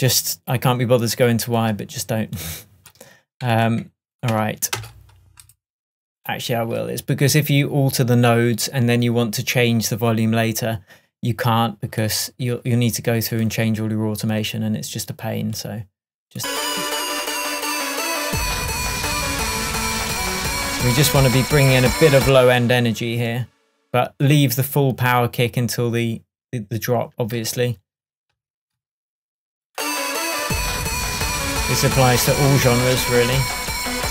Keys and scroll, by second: 4.4 0, 4.9 Return, 22.3 space.